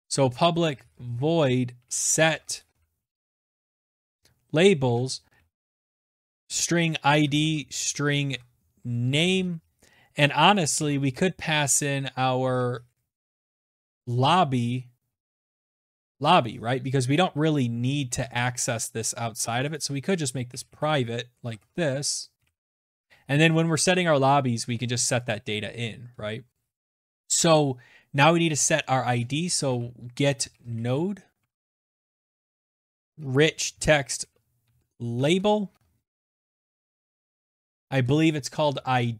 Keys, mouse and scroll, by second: 0.0-14.7 typing, 1.0 Return, 1.6 ctrl+z, 1.9 ctrl+z, 15.9-16.7 typing, 17.8 click, 18.0 click, 18.0-21.7 typing, 23.5 click, 24.4 Tab, 27.4-37.2 typing, 29.6 Tab, 37.3 alt+Tab, 38.5 alt+Tab.